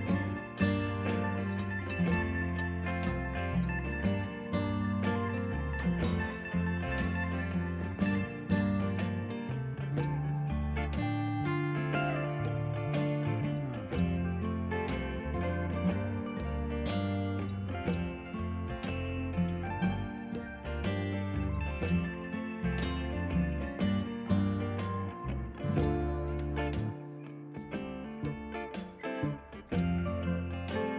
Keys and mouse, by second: 0.6 ctrl+q, 0.8 click, 1.4 click, 2.2 click, 2.5 click, 4.1 click, 4.3 ctrl+r, 5.4 Up, 5.5 click, 6.4 click, 7.2-9.2 typing, 7.3 Return, 7.6 Return, 8.1 Escape, 8.2 click, 9.0 Return, 9.4 Return, 10.2 click, 10.8 a, 10.9 Escape, 11.0 click, 12.1 KP_Decimal, 12.2 Return, 12.8 click, 13.3 s, 14.1 ctrl+click, 14.5 ctrl+q, 14.7 y, 15.0 click, 16.0 ctrl+shift+x, 16.3 click, 16.6 Escape, 16.7 click, 17.1 click, 17.5 shift+click, 17.8 a, 17.9 click, 18.8 click, 18.9 right click, 19.2 click, 21.4 right click, 21.8 click, 22.3 ctrl+click, 22.5 ctrl+shift+a, 22.6 click, 23.5 click, 26.0 shift+click, 26.4 a, 26.5 click, 26.9 KP_0, 27.0 KP_3, 27.1 Return, 28.8 a, 28.9 click, 29.3 ctrl+z, 29.6 ctrl+1, 30.0 Escape, 30.1 click, 30.6 click.